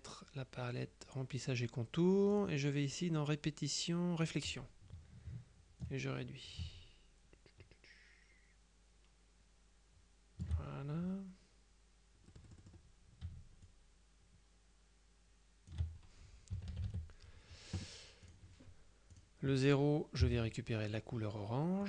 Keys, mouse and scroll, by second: 2.4 click, 3.1-4.8 drag, 5.9-11.0 ctrl+drag, 12.4 click, 13.7-16.3 ctrl+shift+drag, 16.6 KP_Subtract, 18.3 click, 19.2 click, 20.3 F7, 21.0 click.